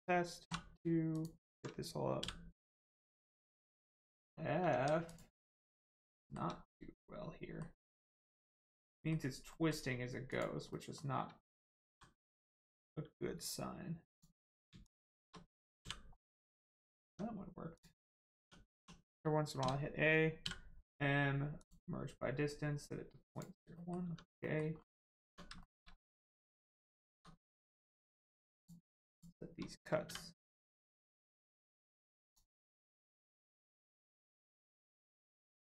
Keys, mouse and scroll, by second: 0.4 2, 1.1 alt+click, 3.8 shift+middle click, 4.3 scroll up 1, 4.7 ctrl+z, 5.1 click, 5.3 scroll down 1, 5.5 middle click, 6.2 shift+middle click, 7.0 middle click, 7.1 middle click, 8.3 click, 8.6 middle click, 10.3 click, 10.7 middle click, 11.9 g, 12.7 right click, 14.1 click, 14.8 shift+click, 16.1 middle click, 16.6 click, 17.0 Tab, 17.7 click, 18.1 scroll down 1, 18.3 Tab, 18.7 1, 21.5 click, 23.7 middle click, 24.0 Tab, 24.4 middle click, 24.7 scroll up 1, 25.2 Tab, 25.5 shift+middle click, 25.9 scroll up 1, 26.9 shift+middle click, 27.3-27.6 scroll up 1, 27.7-28.5 scroll down 1, 28.5 click, 29.1 shift+click, 31.4 click, 32.6-33.3 scroll up 1, 33.4 scroll down 1.